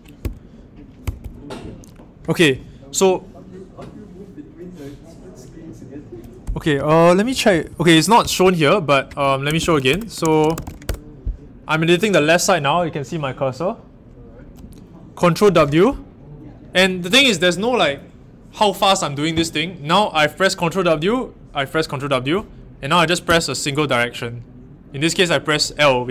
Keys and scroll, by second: 0.2 Down, 1.0 Up, 1.1 Up, 6.4 Down, 6.5 Down, 6.7 Down, 7.2-7.6 typing, 9.2-11.1 typing, 15.4 ctrl+w, 23.2 l.